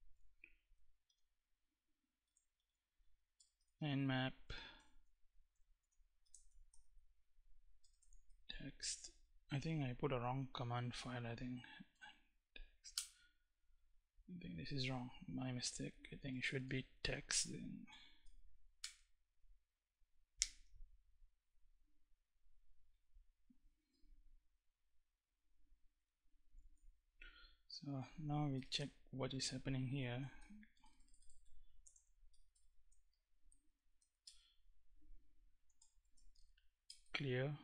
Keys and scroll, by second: 0.7 n, 1.9-4.4 typing, 5.4-7.9 typing, 10.0 ., 11.5 BackSpace, 12.5 Return, 14.7 Up, 15.9 \, 16.1 BackSpace, 17.5 x, 17.9 t, 18.4 Return, 28.2 Return, 29.4-36.5 typing, 36.5 Return.